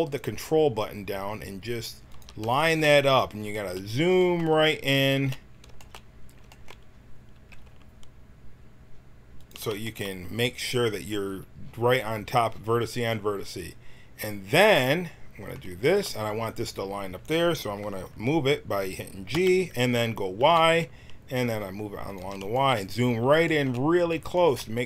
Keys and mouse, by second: 7.3 s, 19.3 g.